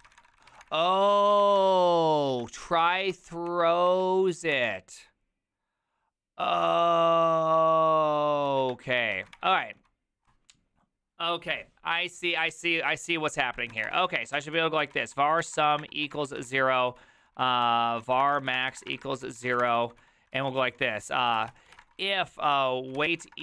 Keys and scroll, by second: 0.0-1.5 typing, 0.6 Return, 1.3 ctrl+c, 1.5 Return, 2.3 ctrl+a, 2.8 2, 3.1 ctrl+c, 3.4 Up, 3.4 w, 3.8 Up, 4.5 Return, 8.4 ctrl+a, 8.7-10.2 typing, 8.9 ctrl+c, 13.4-23.4 typing, 20.3 ctrl+c.